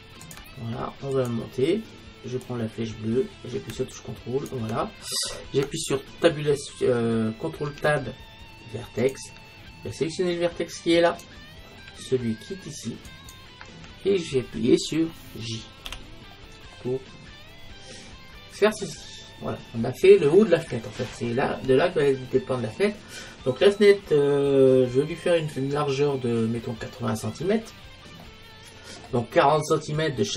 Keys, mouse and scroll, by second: 1.3-4.3 drag, 7.7 ctrl+Tab, 11.2-13.0 right drag, 13.2-15.0 right drag, 15.9 j, 16.9-18.6 middle drag, 19.5-24.2 middle drag.